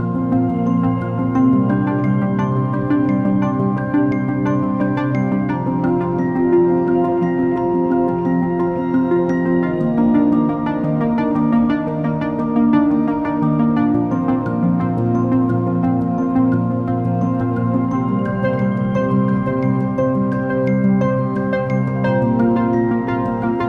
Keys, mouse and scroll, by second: 0.3 space, 2.3-3.4 drag, 3.4 x, 7.4 r, 11.6 r, 21.5-23.6 drag.